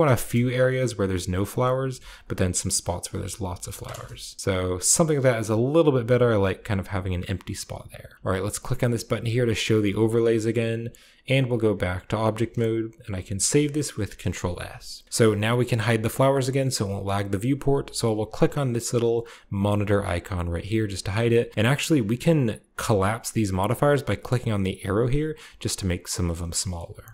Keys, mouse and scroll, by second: 0.0 KP_0, 1.5-1.9 scroll up 1, 1.9 ctrl+middle click, 2.1 ctrl+click, 2.2 ctrl+middle click, 2.3 ctrl+click, 2.4 ctrl+middle click, 2.5-4.4 ctrl+drag, 3.8 KP_0, 5.0-6.4 scroll up 1, 9.5 click, 11.3 click, 11.9 click, 12.6-13.4 scroll down 1, 13.4 ctrl+s, 14.0 a, 15.0-17.1 scroll down 1, 19.6-21.1 drag, 23.8-25.9 drag, 26.4 shift+middle click.